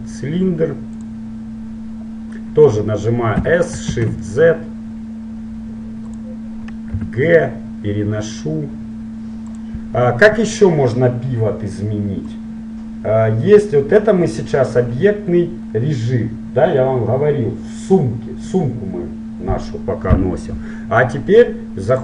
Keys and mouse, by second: 3.4 s, 7.3 g, 12.4-14.3 drag.